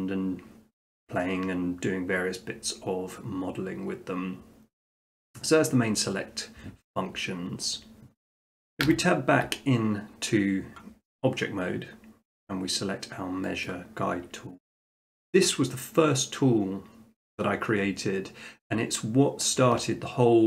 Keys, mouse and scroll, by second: 8.9 Tab, 13.7 click, 14.2-14.7 scroll, 15.2 shift+middle click, 15.7 shift+middle click, 16.4 middle click.